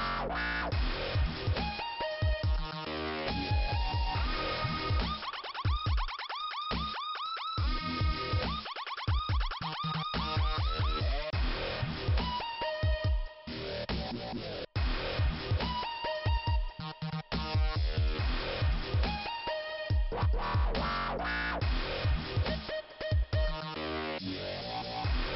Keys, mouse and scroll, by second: 3.2 scroll up 2, 5.4 m, 6.7 click, 6.9 m, 8.6 click, 15.2 scroll up 2, 16.8 scroll down 2, 17.6 click, 18.0 scroll down 2, 19.9 click, 21.2 middle click, 22.4 click, 23.2 scroll up 2, 24.3 click.